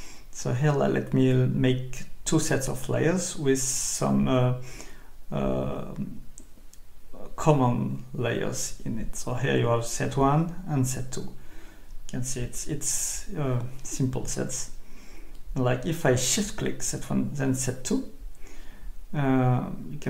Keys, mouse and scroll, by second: 0.1 shift+click, 1.9 click, 2.7 click, 3.1-4.7 typing, 5.9 click, 7.1 Escape, 8.1 click, 9.2 shift+click, 10.3 click, 11.1 click, 11.3-12.7 typing, 13.9 click, 15.2 click, 17.2 click, 19.7 click.